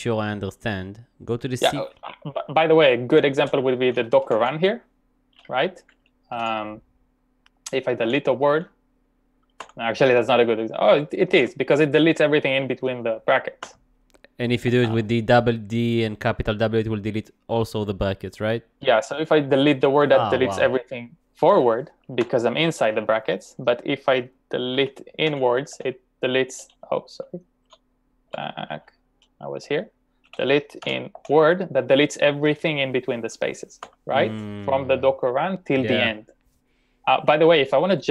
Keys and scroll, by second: 3.0-3.3 typing, 6.2-6.9 typing, 8.0-9.7 typing, 11.1-12.3 typing, 15.6 u, 18.5-19.5 typing, 22.3 u, 24.5-26.2 typing, 28.3 typing, 30.0-31.6 typing, 33.8 u.